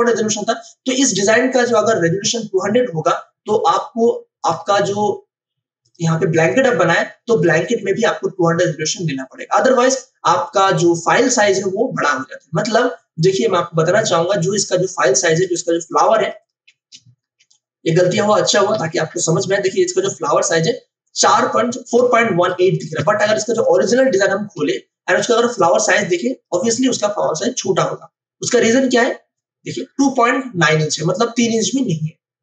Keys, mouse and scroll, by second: 3.6 click, 15.4 space, 15.7 ctrl+click, 17.2 m, 19.5-23.0 drag, 23.0 ctrl+d, 23.8 click, 24.6 space, 25.2 ctrl+click, 28.5-32.4 drag.